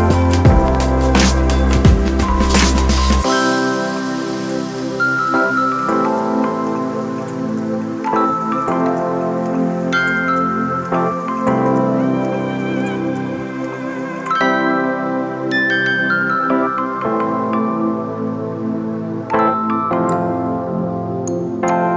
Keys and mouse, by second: 0.2-5.0 shift+drag, 5.0-7.9 shift+drag, 7.9-14.6 shift+drag, 15.8 shift+click, 18.3 shift+click, 19.2 ctrl+t, 20.4-21.9 drag.